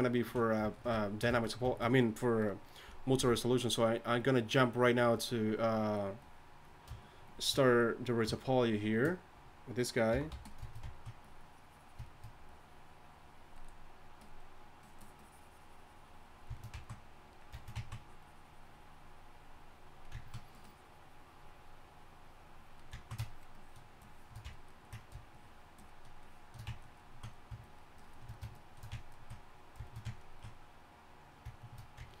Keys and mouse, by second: 3.2 f, 6.4-10.4 drag, 10.1 y, 10.3 f, 12.1-17.0 drag, 18.1-20.1 drag, 20.5-32.2 drag.